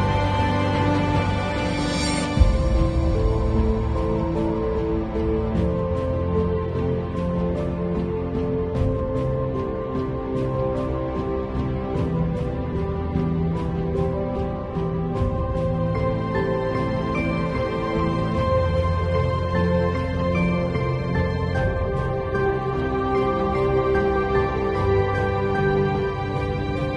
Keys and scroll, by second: 0.3 space, 1.5 x, 2.0 x, 3.1 ], 4.0 space, 6.8-10.2 typing, 8.2 alt+super+z, 11.7 space, 13.3-14.2 typing, 15.3 super+l, 18.3 Return.